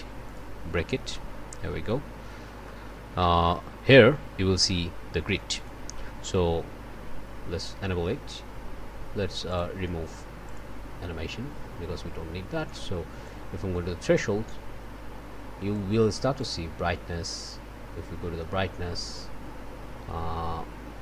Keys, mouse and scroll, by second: 0.2 click, 0.7 click, 1.2 scroll up 1, 1.5 click, 2.3 scroll up 1, 2.6 click, 16.3-17.7 drag.